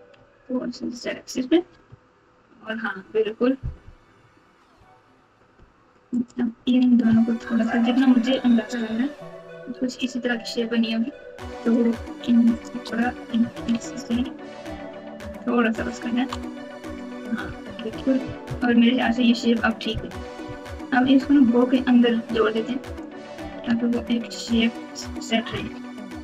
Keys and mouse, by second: 1.6 Tab, 3.8 KP_8, 7.6 shift+click, 8.3 s, 11.6 click, 12.5 shift+click, 13.3 s, 16.3 Tab, 17.6-18.6 typing, 18.9 Tab, 19.2 Tab, 20.4 KP_4, 21.3 Tab, 22.4 click, 22.6 click, 23.6 alt+z, 24.0 click, 25.6 alt+z.